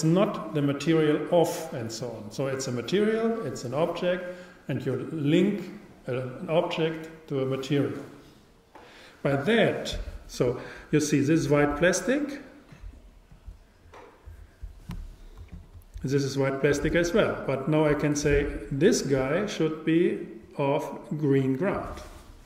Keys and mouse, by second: 12.8-14.6 drag, 15.6-17.4 super+right drag, 21.8 click.